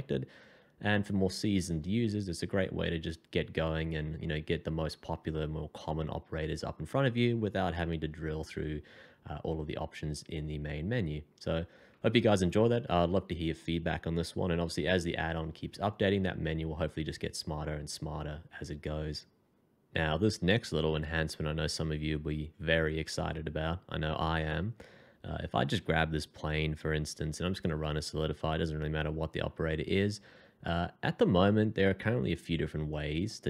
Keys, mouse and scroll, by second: 8.2 shift+2, 27.1 f.